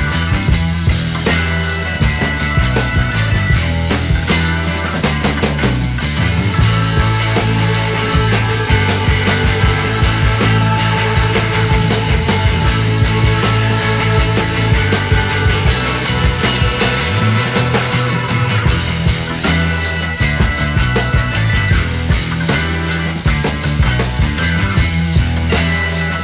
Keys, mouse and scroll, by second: 0.7 Delete, 1.1 KP_0, 2.1-2.5 scroll up 1, 2.5 click, 4.2-7.0 drag, 7.0 scroll up 5, 7.6 scroll down 3, 8.4 click, 10.6 click, 11.2-12.0 scroll up 7, 12.0 scroll down 2, 12.7-15.3 drag, 16.1 KP_1, 16.9-18.0 scroll up 10, 18.9 shift+a, 21.2 click, 22.7-23.2 drag, 24.3-26.1 drag.